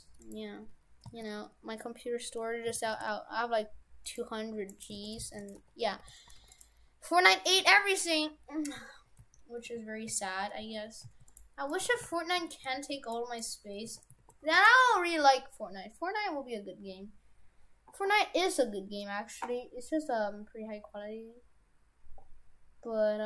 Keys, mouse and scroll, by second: 1.1 d, 1.1 y, 2.6 s, 4.7 right click, 5.0 shift+f, 5.6 Tab, 6.0 shift+f, 7.7 shift+f, 11.8 right click, 11.9 shift+f, 13.4 right click, 13.9 shift+f.